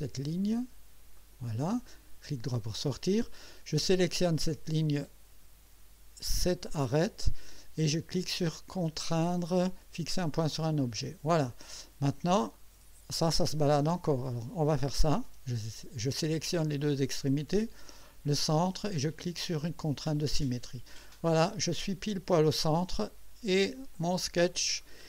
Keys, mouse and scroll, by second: 1.2 click, 2.2 right click, 4.2 click, 6.4 click, 10.4 click, 12.5-14.1 drag, 14.9 click, 16.7 click, 17.9 click, 19.8 click, 23.9 click, 24.8 click.